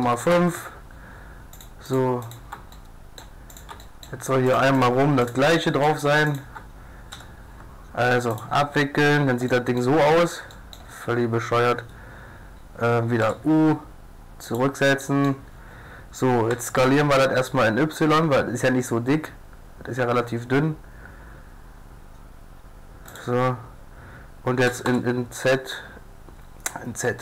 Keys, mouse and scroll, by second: 1.6 click, 2.8 middle click, 3.1 click, 5.6 middle click, 6.4-8.1 drag, 7.1 u, 9.2-12.4 drag, 13.2 u, 15.0 click, 16.5 s, 16.7 click, 16.8 click, 24.7 s.